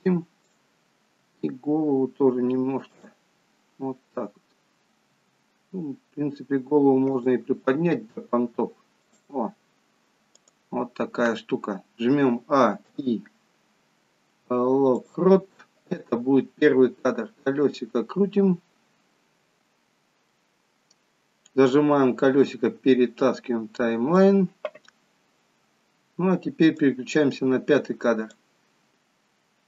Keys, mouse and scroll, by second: 0.5 click, 1.4 r, 5.3 r, 9.2 click, 10.5 click, 12.4 a, 13.0 i, 17.7 scroll up 2, 18.8 scroll up 6, 19.9 scroll up 5, 20.6 middle click, 20.6 scroll up 2, 27.2 click.